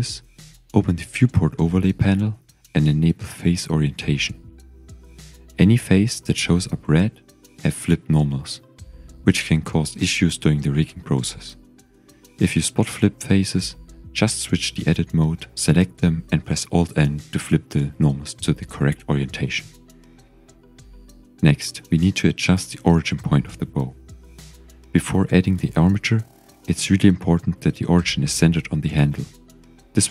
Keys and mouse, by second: 1.3-3.9 drag, 4.8 z, 6.0 click, 6.4 Tab, 8.0 Tab, 8.3 click, 13.7 click, 14.2 click, 15.7 alt+n, 19.5 Tab, 20.3-21.1 shift+drag, 21.5-23.0 drag, 22.6 typing, 24.7 KP_1, 26.1-27.0 shift+drag, 29.0-29.6 shift+middle drag.